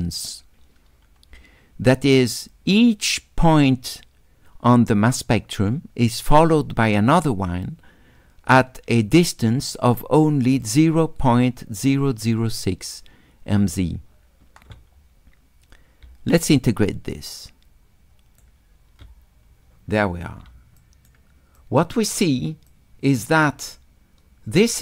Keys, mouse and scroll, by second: 9.5-10.6 drag, 12.2 click, 16.1 s, 16.4-18.4 right drag, 20.8 shift+click, 21.6 shift+click, 22.7-24.8 shift+drag.